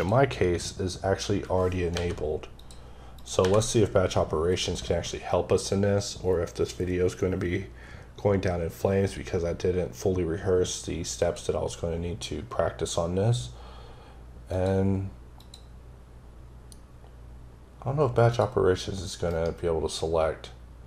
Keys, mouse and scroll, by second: 1.7 n, 2.4 click, 3.0 click, 3.2 n, 11.0 click, 14.3 click, 15.2 click, 18.1 click, 19.1 right click.